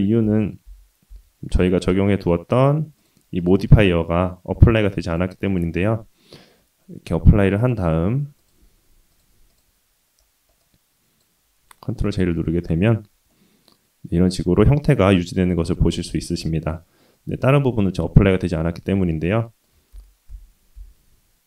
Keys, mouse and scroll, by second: 0.3 ctrl+z, 0.6 ctrl+z, 1.1 ctrl+z, 1.6 ctrl+z, 2.4-3.0 scroll down 2, 3.0 click, 3.3 click, 5.0 click, 6.0-7.0 scroll down 2, 7.5-8.5 drag, 9.1-9.6 drag, 9.8-10.2 scroll up 1, 10.2 scroll down 1, 10.2-10.6 scroll down 1, 10.6 click, 11.6-12.0 scroll up 1, 12.2 ctrl+j, 12.6-13.3 scroll up 2, 13.3-15.1 middle drag, 15.3-15.7 scroll down 1, 15.7-16.1 middle drag, 16.5 scroll down 2, 16.8-17.1 middle drag, 18.9 ctrl+z, 19.4 middle drag, 19.9 ctrl+z, 20.3 ctrl+z.